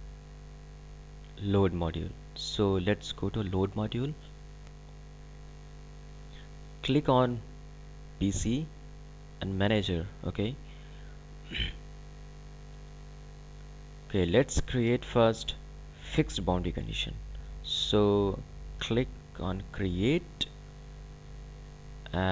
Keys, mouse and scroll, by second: 8.1 click, 9.3 click, 19.2 click.